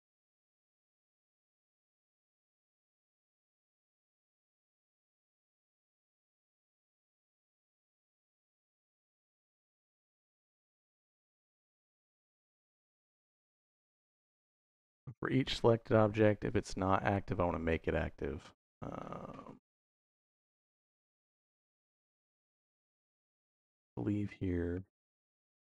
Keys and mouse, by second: 12.2 middle click, 13.3 click, 14.8 middle click, 16.9 click.